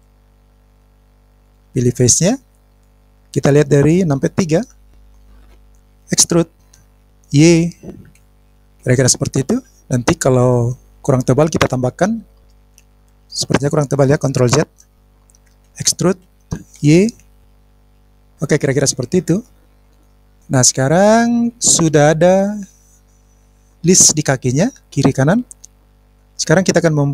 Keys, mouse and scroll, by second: 1.4 click, 4.4 KP_3, 5.1 scroll up 2, 5.5 click, 6.9 e, 8.0 y, 8.7 click, 12.6-12.9 scroll down 2, 12.9 click, 15.1 ctrl+z, 15.6 ctrl+z, 16.3 e, 16.7 y, 18.4 click, 19.4 middle click, 19.8 scroll down 2, 19.8 scroll up 1, 19.9 scroll down 1, 20.3-26.4 middle drag.